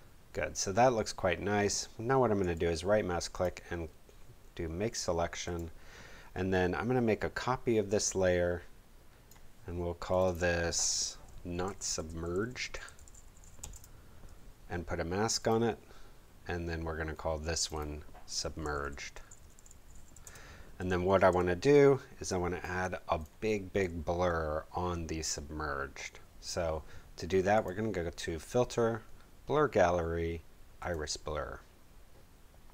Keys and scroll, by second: 11.4-13.9 typing, 18.1-21.3 typing.